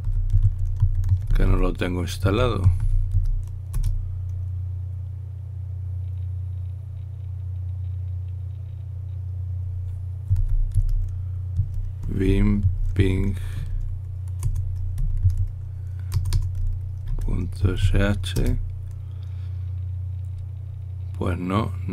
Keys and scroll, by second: 1.0-4.4 typing, 4.6 Return, 10.8-16.0 typing, 17.1-19.1 typing.